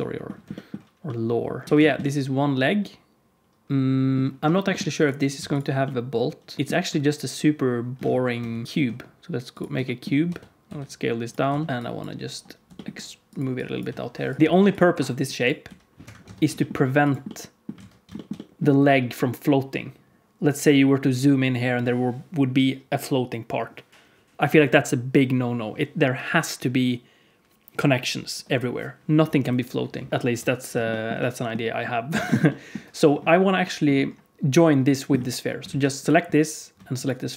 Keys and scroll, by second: 1.6 alt+a, 1.6 g, 5.3 x, 8.4 shift+c, 8.6 shift+a, 10.2 Tab, 10.6 s, 11.4 s, 12.6 g, 13.8 s, 14.4 g, 14.4 s, 15.6 g, 16.2 Tab, 16.4 g, 17.7 alt+z, 30.1 alt+a, 30.2 KP_1, 35.6 alt+a.